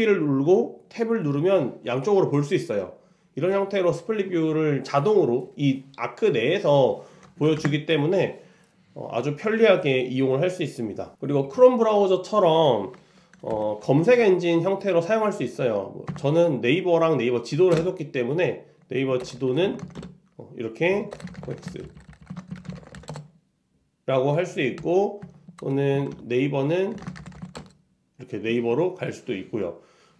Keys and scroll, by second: 7.7 super+s, 13.6 super+l, 24.9 super+i.